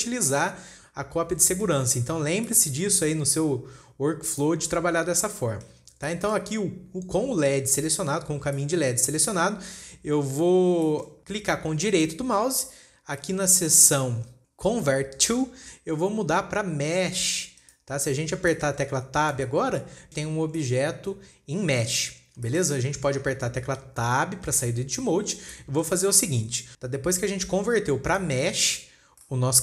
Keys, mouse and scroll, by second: 1.9-2.3 middle drag, 2.3-3.0 scroll up 6, 3.0-3.7 shift+middle drag, 3.7 scroll up 2, 4.8 click, 5.2-5.6 scroll down 5, 5.7 shift+middle click, 6.3 scroll down 2, 6.5-8.7 middle drag, 8.7-9.0 scroll up 4, 9.0-9.4 shift+middle drag, 9.4-11.2 scroll up 1, 11.3-12.3 shift+middle drag, 12.3-18.5 right drag, 18.5 scroll up 2, 19.0-19.3 shift+middle drag, 19.3-19.9 scroll down 2, 19.9 Tab, 20.2-20.7 scroll up 2, 20.7-21.0 scroll down 2, 21.0-22.4 shift+middle drag, 22.4 scroll up 1, 22.5-22.9 scroll down 5, 22.9-25.1 shift+middle drag, 25.1 Tab, 25.2-26.0 scroll down 2, 26.0-26.9 middle drag, 26.9-28.2 scroll up 3, 27.5 shift+middle click, 28.2-28.6 scroll down 3, 28.6-29.3 middle drag, 29.3-29.6 scroll up 2.